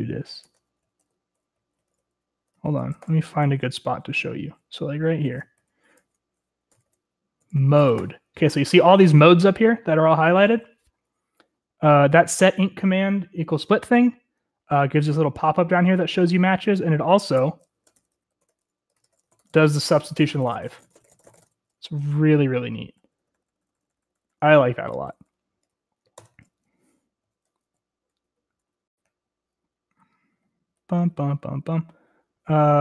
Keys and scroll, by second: 0.5 Escape, 0.9-8.8 typing, 17.9-25.2 typing, 26.2 Escape, 27.5-28.3 typing, 29.6-30.8 k, 31.8 k.